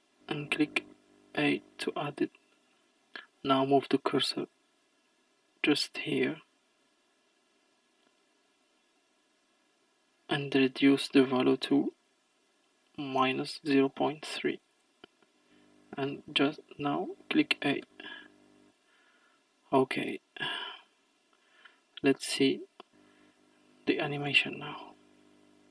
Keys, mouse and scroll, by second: 3.6-7.1 drag, 19.7-24.3 drag, 24.3-25.7 scroll down 1.